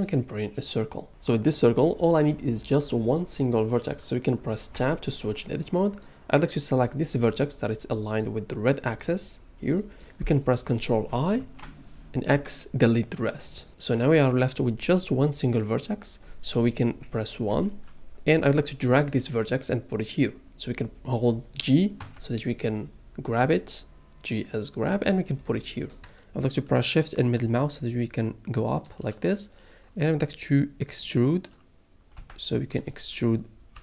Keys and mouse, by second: 3.4 middle drag, 4.7 Tab, 5.7 middle click, 6.6 click, 9.7 middle click, 11.3 ctrl+i, 12.3 x, 14.8 click, 17.4 KP_1, 22.0 g, 25.7 click, 26.8 shift+middle click, 32.2 g, 32.8 click, 33.7 e.